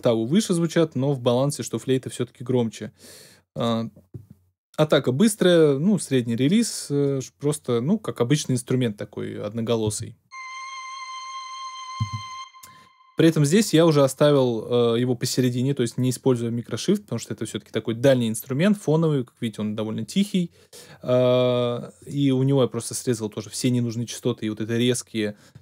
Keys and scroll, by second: 9.8 space, 11.9 space.